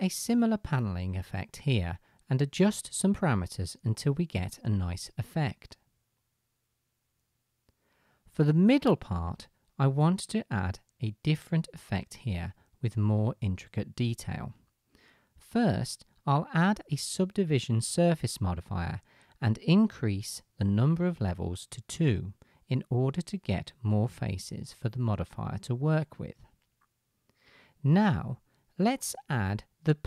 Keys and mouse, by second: 0.7 middle click, 0.7 right click, 2.9 click, 3.7 KP_0, 5.9 KP_0, 8.3-8.9 middle drag, 9.3-14.9 drag, 14.9-30.0 middle drag.